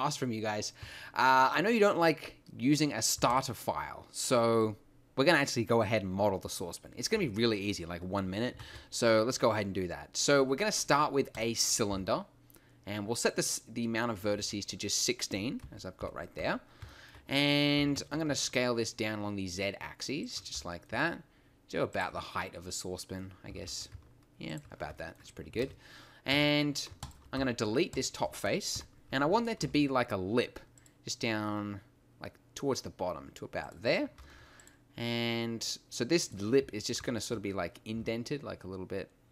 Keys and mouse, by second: 3.1 x, 7.1 KP_7, 8.6 shift+a, 11.9 t, 13.5-14.7 drag, 14.7 middle click, 15.6 KP_1, 16.0 KP_5, 16.4 t, 17.8 s, 20.6 g, 23.5 s, 24.6-26.9 drag, 25.6 ctrl+space, 26.3 Tab, 27.4 x, 28.7 KP_1, 29.6 ctrl+r, 33.7 click, 34.2 ctrl+r, 36.8 click, 37.9 s.